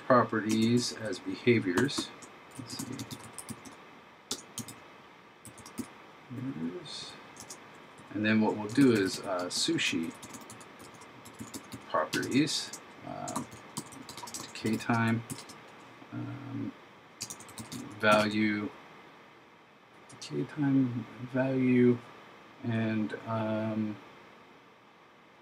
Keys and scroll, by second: 0.6 shift+Right, 2.9 shift+b, 8.9 shift+s, 10.1 shift+p, 12.6 shift+9, 13.4 shift+d, 17.4 shift+v.